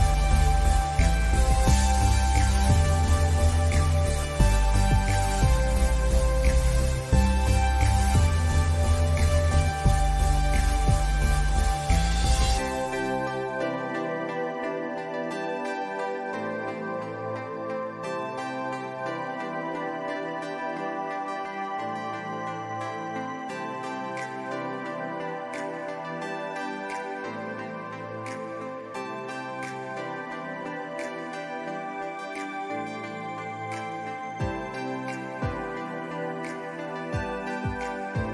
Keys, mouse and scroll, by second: 1.3 space, 1.4 click, 1.5 space, 2.0 click, 7.2 ctrl+z, 7.8 click, 12.2 alt+scroll down 1, 12.8-13.1 alt+scroll up 1, 13.1 click, 13.8 alt+scroll up 1, 16.0 ctrl+z, 19.7 click, 23.4 click, 26.3 alt+scroll down 1, 27.2 click, 29.1 click, 29.5 alt+scroll up 1, 30.8-38.3 drag.